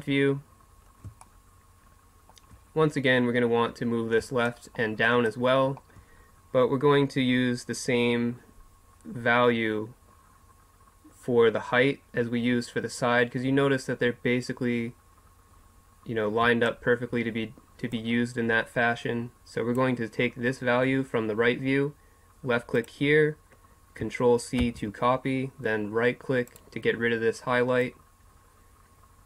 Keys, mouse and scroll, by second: 0.6 middle click, 1.2 middle click, 1.6 middle click, 17.9-29.2 drag.